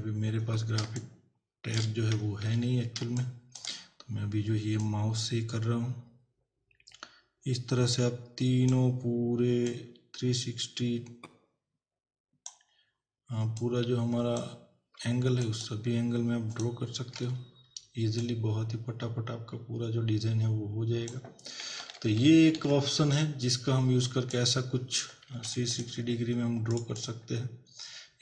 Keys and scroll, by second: 0.8 space, 2.5 ctrl+=, 3.0 space, 21.8 ctrl+-, 25.3 z.